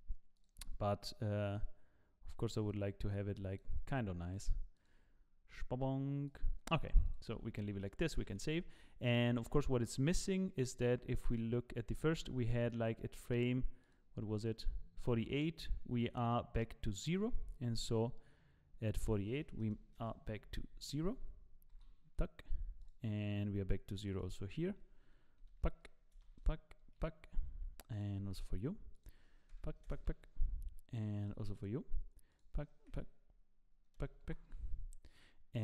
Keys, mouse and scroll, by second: 0.4 click, 1.1 click, 1.5 click, 4.7 click, 7.3 click, 7.8 middle click, 8.2 ctrl+s, 10.7 click, 11.3 click, 13.3 click, 15.1 click, 15.7 click, 16.9 click, 20.0 click, 21.7 i, 22.8 click, 22.8 i, 24.0 click, 27.9 click, 28.9 click, 31.2 click, 31.5 click, 34.6 click, 35.5 click.